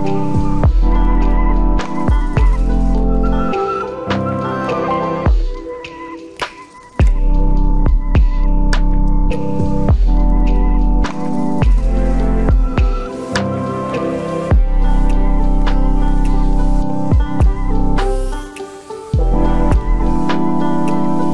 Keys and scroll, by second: 11.2 ctrl+u.